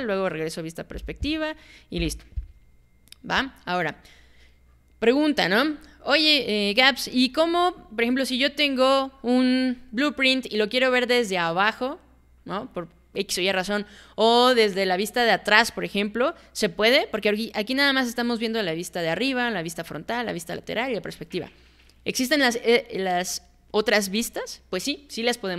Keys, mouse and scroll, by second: 0.9 space, 2.0 space, 3.4 click.